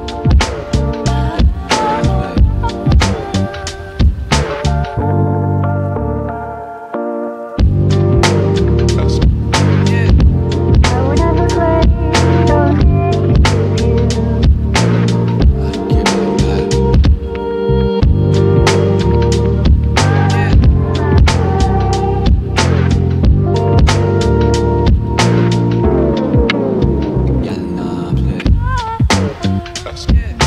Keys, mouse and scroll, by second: 0.0 click, 0.0 typing, 0.5-1.2 scroll up 1, 1.2 click, 2.3 right click, 3.3 click, 7.1 right click, 9.7 click, 16.4 shift+click, 17.2-17.5 scroll up 1, 17.2 typing, 17.7 right click, 18.5 click, 19.0 scroll up 1, 19.9-22.2 drag, 22.6 scroll down 1, 24.0 typing.